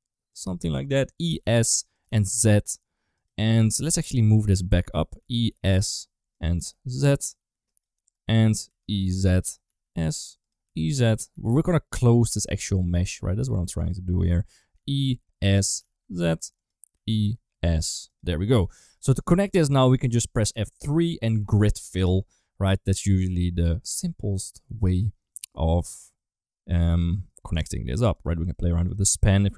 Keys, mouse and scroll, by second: 0.6 shift+middle click, 1.0 e, 1.9 g, 3.4 s, 4.3 middle click, 5.1 e, 6.4 g, 8.0 middle click, 8.5 e, 9.5 s, 10.5 e, 11.2 s, 12.4 middle click, 12.7 shift+middle click, 12.9 g, 14.4 e, 15.7 g, 16.8 e, 18.6 middle click, 18.9 shift+middle click, 19.4 middle click, 20.4 F3, 23.9 scroll up 2, 24.0 middle click, 24.2 scroll down 2, 27.0 scroll up 2, 27.1 scroll down 2, 28.0 click, 28.4 click, 28.8 click.